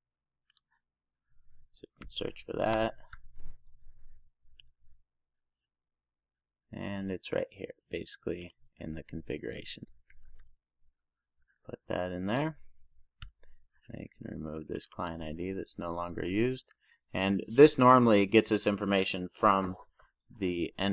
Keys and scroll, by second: 9.9 super+z, 10.2 super+v, 16.7 super+s.